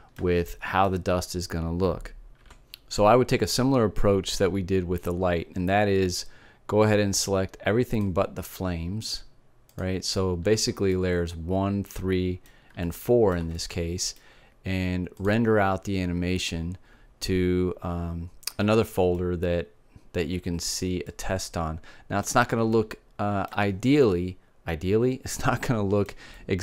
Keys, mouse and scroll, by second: 3.3 middle click, 8.8-12.6 drag, 12.3 middle click, 16.1-18.1 drag, 20.1-21.1 middle drag, 22.2-25.6 middle drag, 26.2-26.6 middle drag.